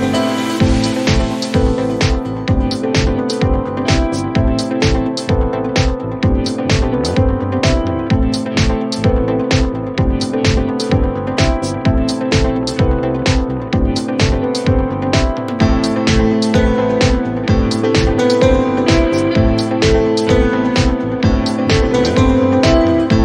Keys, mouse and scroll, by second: 2.6-4.8 drag, 5.4 click, 5.6-7.1 middle drag, 7.7-9.2 drag, 9.3 scroll down 1, 9.5-12.4 middle drag, 12.4-13.7 drag, 13.7-14.1 scroll up 1, 14.1 middle click, 14.8 scroll down 2, 15.0-18.3 middle drag, 19.0-20.1 scroll up 1, 20.1-23.2 drag.